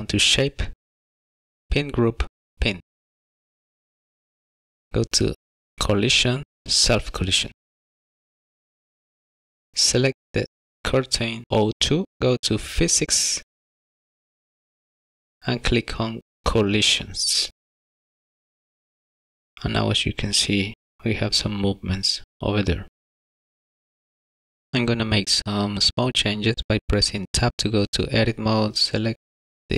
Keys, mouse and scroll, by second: 1.7 click, 3.2 click, 5.5 click, 8.0 click, 8.2 click, 8.7-9.7 scroll up 5, 9.0 click, 10.7 click, 14.3 click, 17.2 click, 18.5 click, 19.5 click, 24.3 click, 24.4 shift+middle click, 25.8 Tab, 26.7 middle click, 28.7 middle click, 29.7 alt+click.